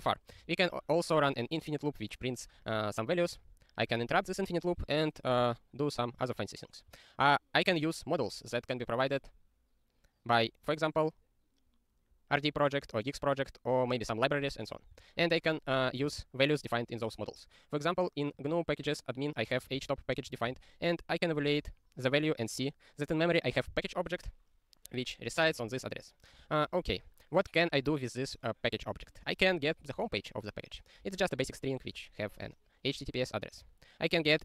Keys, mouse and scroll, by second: 0.1 ctrl+n, 0.4 ctrl+e, 3.3 ctrl+b, 6.2 click, 12.4 click, 13.1 click, 14.8 ctrl+p, 14.9 ctrl+e, 16.1 ctrl+e, 17.0 click, 18.4 click, 19.4 click, 19.7 ctrl+space, 19.8 ctrl+a, 20.1 ctrl+g, 20.3 ctrl+e, 28.7 click, 30.0 ctrl+e, 33.2 ctrl+n, 34.3 ctrl+e.